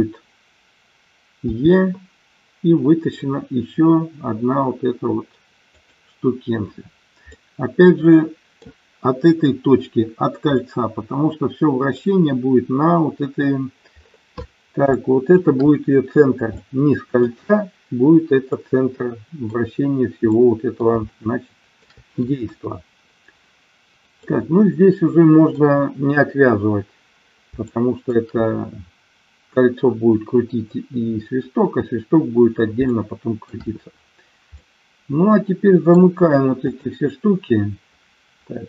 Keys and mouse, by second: 1.4 e, 5.7 click, 7.4-8.6 middle drag, 10.6-12.0 middle drag, 15.0 shift+middle click, 16.5 middle click, 18.5-19.5 middle drag, 20.4 middle click, 21.0 shift+middle click, 22.4 KP_1, 24.2-25.6 middle drag, 27.6 shift+middle click, 32.9 shift+middle click, 34.5-36.0 middle drag, 36.6 click.